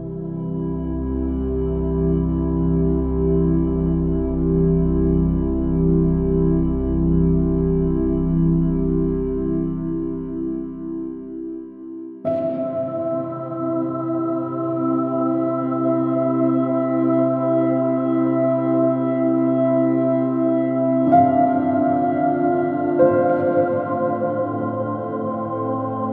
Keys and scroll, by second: 1.7 super+i, 16.8 alt+super+z, 20.9 x, 21.8 super+z, 22.3 x, 24.0 super+z.